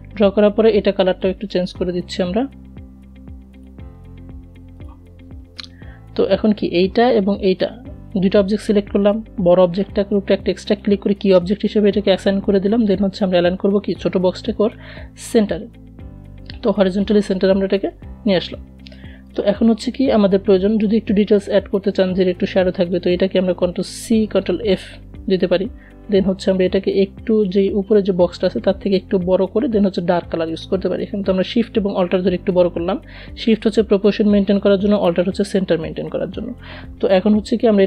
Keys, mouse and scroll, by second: 4.4 v, 5.9 shift+click, 13.0 click, 15.3 click, 19.9-20.5 alt+scroll up 1, 21.2 click, 22.3 ctrl+c, 22.7 ctrl+f, 28.4-37.8 drag.